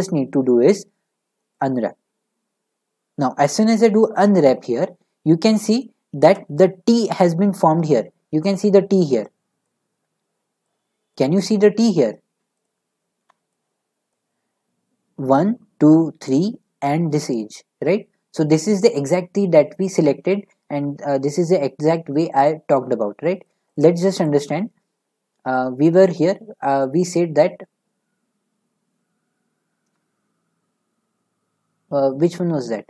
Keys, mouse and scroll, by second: 1.6-4.6 drag, 5.3-5.7 middle drag, 5.7 scroll, 6.1 middle click, 9.6 click, 11.1 click, 12.5-13.6 shift+drag, 23.5 middle click, 23.7 click, 26.0 middle click.